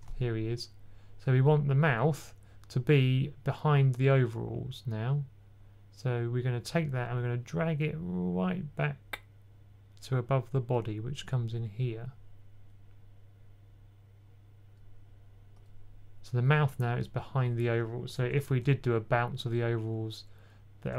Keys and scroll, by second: 18.4 typing.